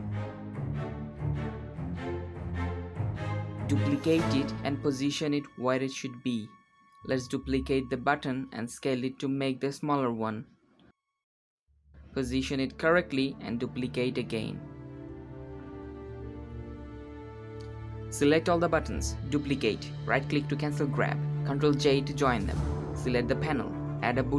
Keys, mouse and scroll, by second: 0.1 ctrl+b, 1.2 click, 2.1 shift+d, 4.9 g, 7.4-9.0 scroll down 5, 9.0 s, 11.2 g, 12.2-13.4 middle drag, 13.4 g, 14.5 middle click, 15.2 g, 15.8 shift+d, 18.0 shift+click, 18.8 middle click, 19.6 shift+d, 22.1 ctrl+j, 23.2 click.